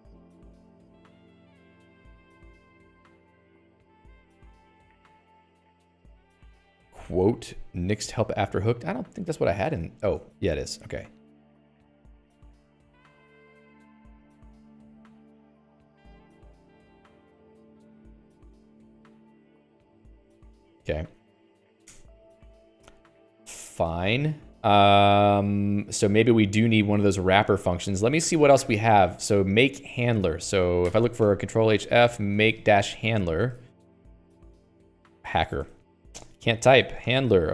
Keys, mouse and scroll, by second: 9.0 Escape, 10.2 Escape, 22.8 Escape, 23.4 Escape, 23.5 Escape, 23.9 ctrl+s, 24.2 Escape, 24.5-27.4 typing.